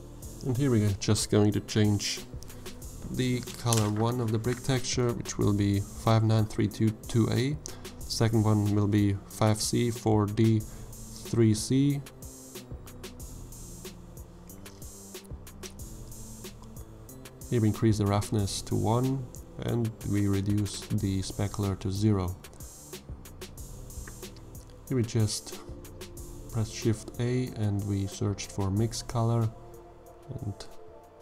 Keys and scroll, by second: 4.7 5, 4.9 9, 6.1 3, 6.3 2, 7.0 a, 7.2 Return, 11.0 5, 11.4 c, 12.4 4, 12.8 d, 13.9 3, 14.2 c, 14.5 Return, 22.9 g, 24.5 shift+a, 25.3 m, 25.5 i.